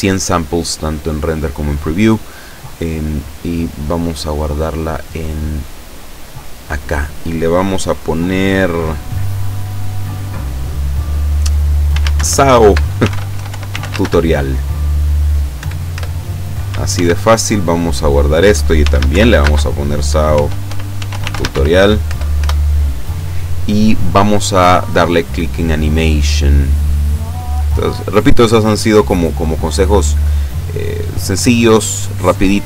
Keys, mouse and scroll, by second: 3.8 click, 5.4 click, 6.6 click, 11.9-14.0 typing, 15.6 Return, 16.9 ctrl+s, 18.0 click, 18.8-21.6 typing, 22.1 Return, 25.1-26.2 scroll up 3, 26.9 click.